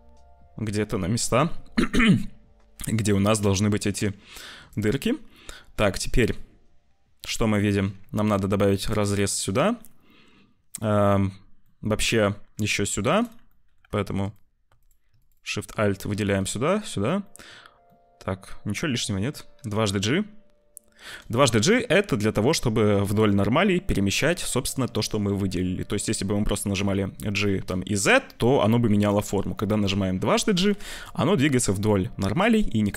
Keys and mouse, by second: 5.1-6.3 drag, 6.3-7.7 middle drag, 7.9 ctrl+r, 9.2-10.9 middle drag, 11.6-12.6 middle drag, 12.8 ctrl+r, 13.4 middle click, 14.1 alt+shift+click, 15.7 click, 16.8 click, 17.1 click, 17.8-19.2 drag, 19.5 g, 21.3 click, 25.1 click, 26.7 g, 30.5 g.